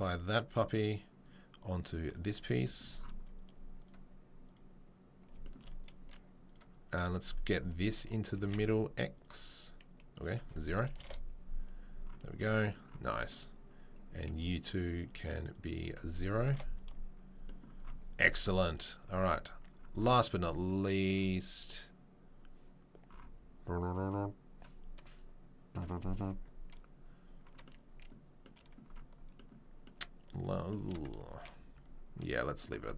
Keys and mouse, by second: 0.1-1.3 right drag, 1.3-5.8 middle drag, 5.8 click, 5.9-6.4 middle drag, 6.4 click, 6.5-9.1 middle drag, 8.4 ctrl+c, 9.1 click, 9.2 middle click, 10.1-14.2 drag, 14.2 middle click, 14.9 click, 15.5 middle click, 15.7-32.9 drag, 31.7 ctrl+s.